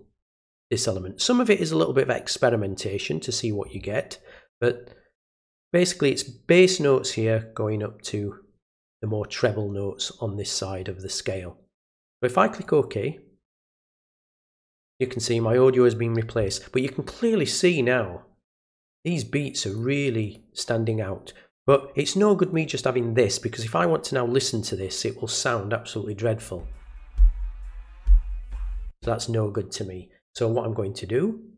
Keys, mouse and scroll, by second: 12.6 click, 18.8 click, 19.7 click, 20.2 click, 22.4 click, 25.3 click.